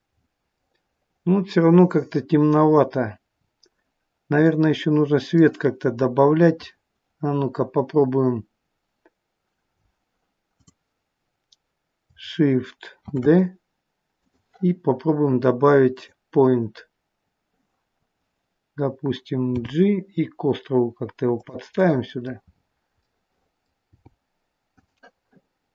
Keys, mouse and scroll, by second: 0.0-0.4 scroll down 8, 0.7 middle click, 3.1-3.5 scroll up 2, 4.5 middle click, 9.7-10.4 scroll down 4, 10.4 click, 13.1 shift+d, 15.8 click, 19.5 g, 21.7 middle click, 22.3 scroll up 1, 22.9 middle click, 22.9 scroll up 5, 23.8 g.